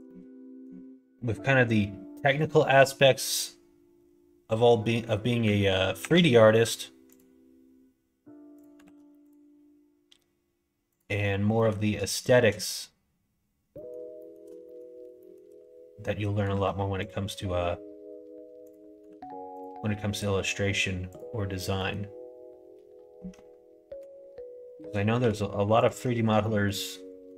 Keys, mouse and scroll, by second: 0.0 middle click, 5.9 ctrl+r, 8.8 ctrl+r, 11.6 middle click, 12.1 shift+middle click, 13.7 middle click, 14.2 shift+middle click, 14.6 middle click, 15.2 shift+middle click, 16.4 ctrl+r, 19.0 ctrl+r, 21.8 middle click, 23.9 2, 25.1 2, 25.8 alt+click, 26.3 middle click.